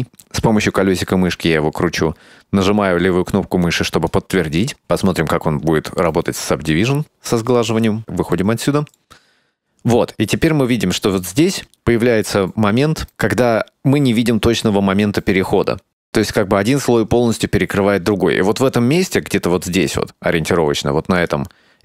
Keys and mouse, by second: 3.9 middle click, 6.0 click, 8.0 Tab, 8.4 middle click, 11.1 shift+middle drag, 19.8 Tab, 21.2 right click.